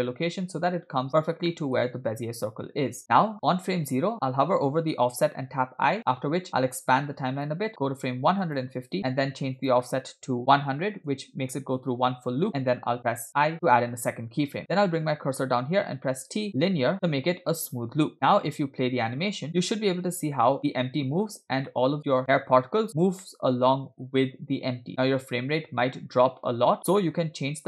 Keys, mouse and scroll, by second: 0.2 alt+g, 0.9-1.5 scroll up 3, 1.5-1.8 shift+middle drag, 6.8 i, 6.8 click, 8.9 click, 9.9-11.4 drag, 10.7 0, 13.4 i, 16.0 t, 18.7-19.1 drag, 19.5 space, 22.0-22.9 middle drag, 23.7-24.8 middle drag, 26.8 space.